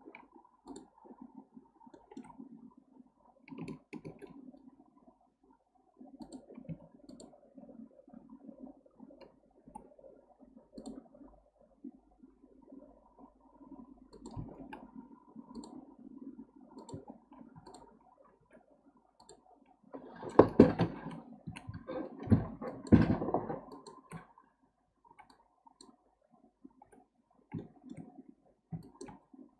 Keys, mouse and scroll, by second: 0.7 shift+click, 1.9-2.3 shift+middle drag, 2.3-3.9 scroll up 3, 4.0 ctrl+b, 6.7 1, 7.1 click, 9.6 k, 17.5 2, 17.7 drag, 18.4 x, 19.9-21.0 scroll down 1, 21.0 `, 21.5 1, 22.7 drag, 23.7 shift+click, 25.1 j, 25.3 click, 26.8 j, 27.6-28.8 shift+middle drag, 28.8 shift+drag.